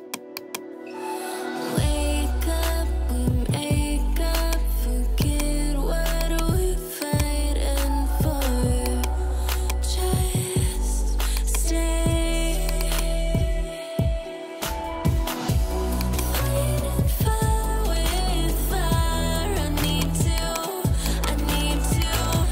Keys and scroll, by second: 2.1 BackSpace, 3.0 space, 3.1 3, 14.0 4, 14.7 Return.